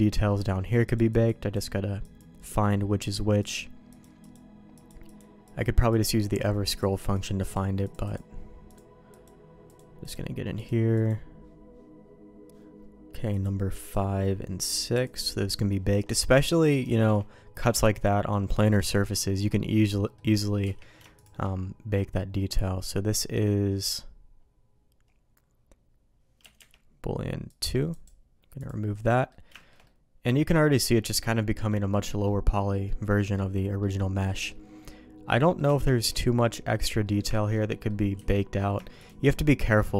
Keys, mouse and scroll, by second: 7.3-11.4 drag, 14.9 click, 16.8 shift+middle click, 20.0 middle click, 20.6 q, 26.6 Escape, 29.1 middle click, 29.5 shift+middle click, 29.8 middle click, 31.3 middle click, 32.0 middle click, 32.8 middle click, 34.3 middle click, 34.8 middle click, 35.7 shift+middle click, 36.3 middle click, 37.0 middle click, 37.3 shift+middle click, 37.7 middle click, 38.8 shift+q.